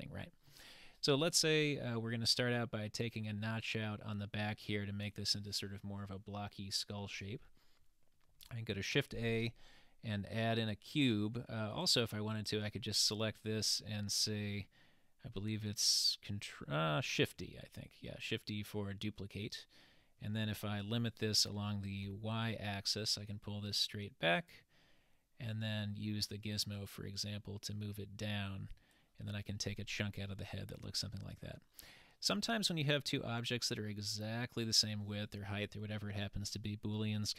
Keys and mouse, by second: 8.3 shift+a, 12.4 click, 17.9 shift+d, 26.8-29.0 drag.